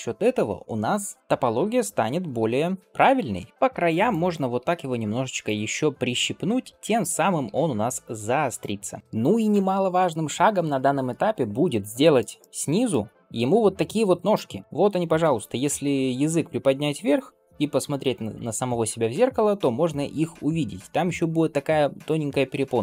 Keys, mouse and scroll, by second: 1.2 middle click, 1.2 click, 2.2 g, 3.5 middle click, 3.5 s, 3.9 click, 4.4 s, 5.9 shift+middle click, 6.4 click, 6.7 middle click, 7.3 s, 8.4 click, 8.9 s, 11.5 scroll down 1, 11.9 shift+middle drag, 12.2-12.8 middle drag.